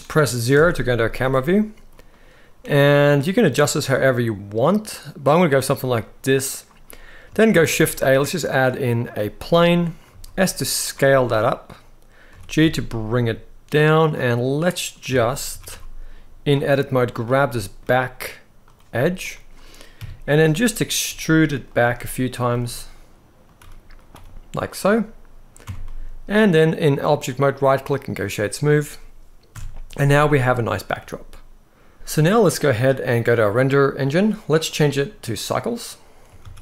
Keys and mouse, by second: 0.2 KP_0, 1.6 click, 2.3 g, 2.5 middle click, 5.3-7.0 drag, 7.2 shift+a, 9.8 s, 10.5 drag, 10.8-11.1 middle drag, 12.0 g, 12.3 z, 13.7 click, 14.4 middle click, 14.8 Tab, 15.2 s, 15.4 x, 16.2 click, 17.2 middle click, 18.4 click, 18.9 click, 19.7 KP_3, 20.8 e, 21.5 e, 22.0 click, 22.2 e, 23.2 click, 23.3 e, 23.8 e, 24.4 click, 25.3 Tab, 25.5-26.1 middle drag, 26.7-28.4 right drag, 29.2 KP_0, 31.9 ctrl+b, 34.4-35.2 drag, 36.2 ctrl+s, 36.4 ctrl+s.